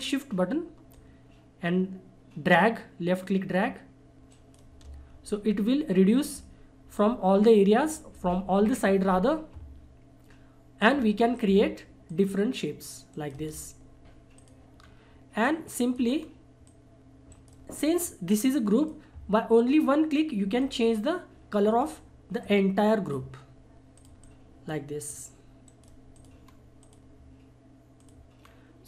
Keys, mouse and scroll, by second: 0.9-4.3 shift+drag, 4.3 shift+right click, 10.8 click, 12.1 shift+click, 13.1 shift+right click, 14.4 click, 14.8-15.4 scroll down 1, 15.4 click, 16.1 scroll up 1, 16.6 click, 17.3 right click, 17.8 click, 21.7-22.4 scroll down 1, 22.4-25.6 drag, 25.6 right click, 26.1 click, 26.4 scroll up 1, 26.8 click, 28.4 scroll down 1.